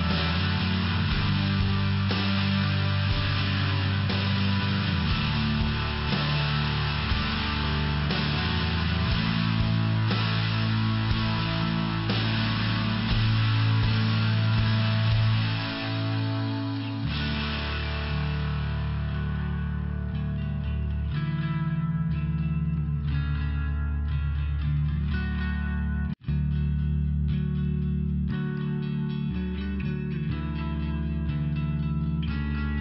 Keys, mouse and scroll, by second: 0.2 click, 0.9 click, 1.3 click, 1.9 click, 2.6 click, 3.4 click, 3.5 click, 4.4 click, 5.0 click, 6.6 click, 7.0 click, 7.8 click, 8.5 click, 9.0 click, 9.7 click, 11.4 click, 11.7 click, 12.2 click, 13.3 click, 13.8 click, 14.4 click, 14.9 click, 15.4 click, 15.5 double click, 16.7 double click, 17.2 click, 17.6 click, 18.3 click, 19.1 click, 19.9 click, 22.4 click, 24.3 click, 27.2 click, 27.4 click, 30.0 click, 31.0 click, 31.7 click, 32.4 click.